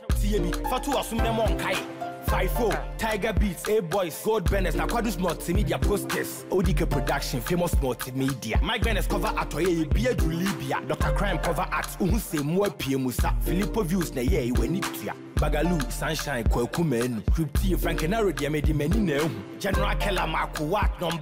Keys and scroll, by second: 10.1 ctrl+t.